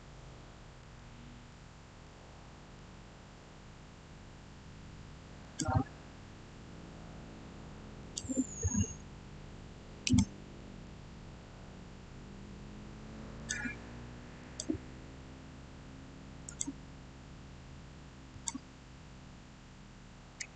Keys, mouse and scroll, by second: 1.9-4.9 middle drag, 5.3 click, 7.9 click, 9.0-10.0 scroll up 1, 10.0 click, 10.5 middle click, 11.4-13.1 scroll down 1, 13.3 click, 16.3 click, 20.5 shift+middle click.